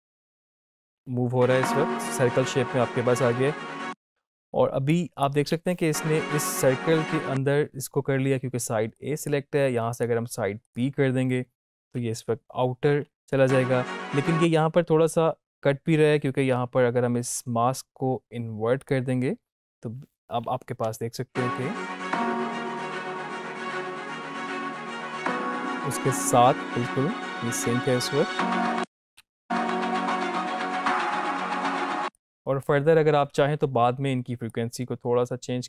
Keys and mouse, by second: 0.9 space, 3.3 space, 4.1-5.5 drag, 5.5 space, 8.9 click, 15.7 space, 20.8 click, 20.8 space, 30.9 space, 31.6 space, 32.1-35.6 drag.